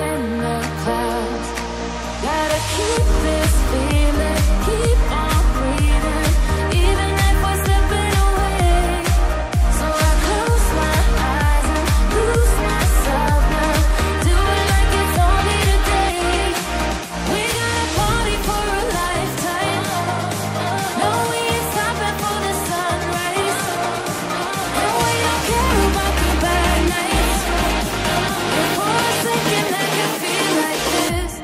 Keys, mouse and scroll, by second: 3.3 double click, 5.3-6.4 scroll up 1, 6.5 click, 8.2-8.6 scroll up 1, 8.6 click, 9.9 click, 10.0 double click, 13.2 click, 13.6-14.8 scroll down 1, 19.6 click, 20.9-21.7 typing, 22.0 click, 25.3 click, 29.9-31.4 typing.